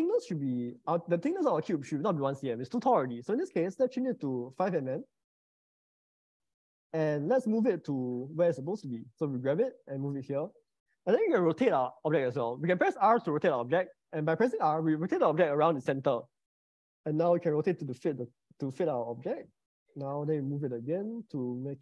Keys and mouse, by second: 1.8-5.4 drag, 4.8 0, 8.3 g, 14.4 r, 20.7 g.